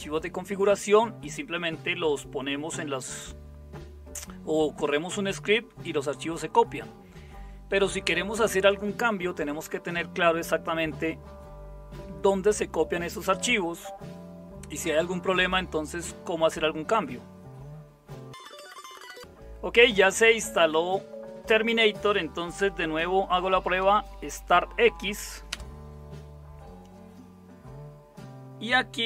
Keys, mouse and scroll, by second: 22.9-25.3 typing, 25.5 Return.